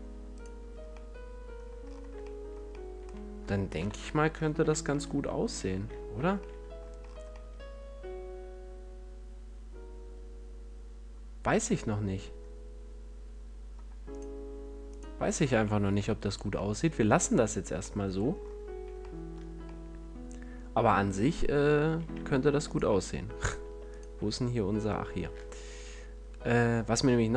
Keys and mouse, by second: 0.9 middle click, 1.1 middle click, 1.3 middle click, 1.4 middle click, 1.5-2.8 middle drag, 3.7 KP_1, 4.6 z, 5.5 a, 6.1 z, 14.1-19.9 middle drag, 15.5 a, 22.1 Tab, 22.5 Tab, 23.6 Tab, 25.4 ctrl+r.